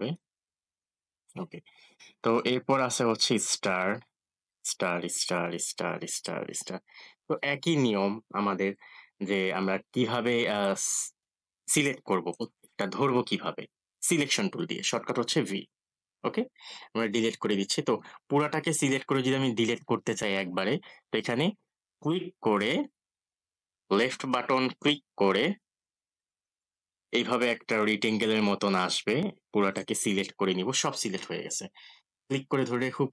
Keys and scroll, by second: 15.2 v.